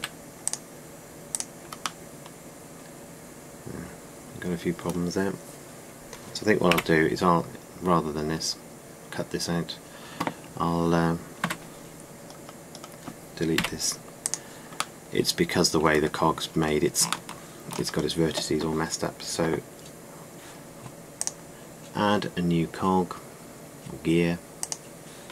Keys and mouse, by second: 0.0 a, 0.6 c, 2.8 middle click, 7.4 Delete, 12.1 Tab, 13.0-14.2 middle drag, 14.2 Delete, 23.6-25.3 drag.